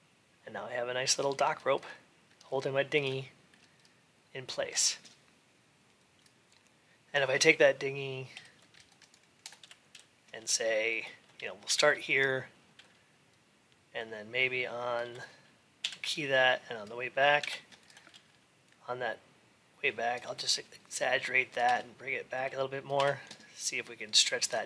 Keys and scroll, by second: 17.2 ctrl+a.